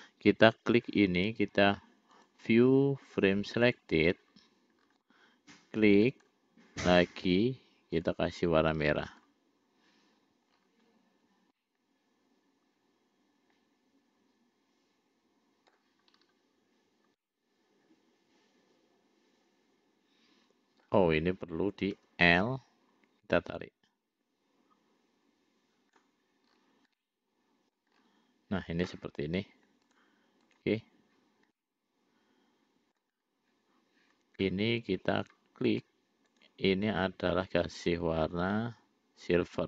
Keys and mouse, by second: 0.3 click, 2.6-4.3 drag, 6.4 click, 8.5 click, 9.6 click, 11.9-16.2 middle drag, 17.6-21.4 middle drag, 22.4 l, 23.7-26.5 drag, 27.4 middle click, 30.2 click, 31.9-33.5 middle drag, 35.4 click, 36.6 click.